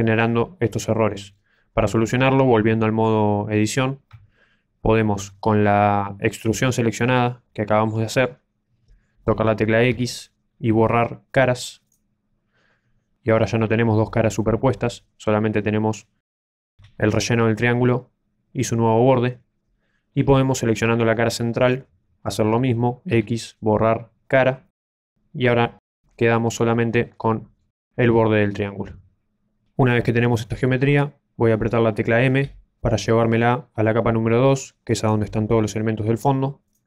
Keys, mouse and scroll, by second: 4.0 Tab, 6.9 middle click, 9.8 x, 13.4 Tab, 13.5 middle click, 16.2 scroll down 2, 16.4 Tab, 17.0 right click, 21.6 right click, 23.0 x, 25.4 middle click, 30.7-31.7 scroll down 2, 32.4 m, 36.6 click.